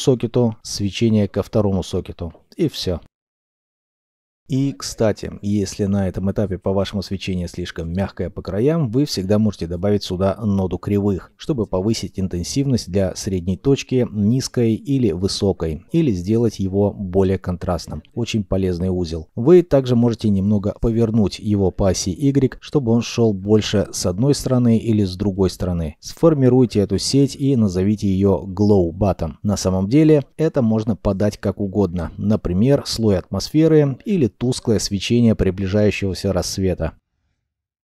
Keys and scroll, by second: 3.6 g, 9.6 u, 9.7 r, 28.1 ctrl+k, 28.4 ctrl+j, 29.1-29.9 typing, 33.6 3, 33.7 Return.